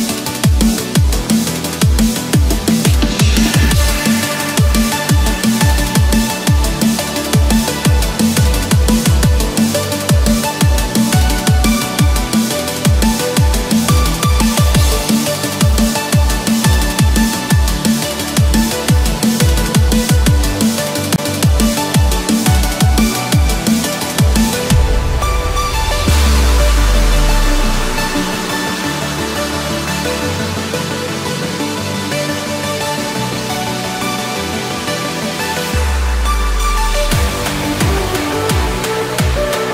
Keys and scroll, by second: 1.7 Return, 2.5 Escape, 6.3 Return, 6.9 Escape, 11.2 Return, 15.2 Delete, 15.7 Return, 16.3 Escape, 22.7 Return, 23.6 Escape, 27.4 Escape, 32.6 Return, 33.8 ctrl+z, 34.9 Escape, 39.4 Return.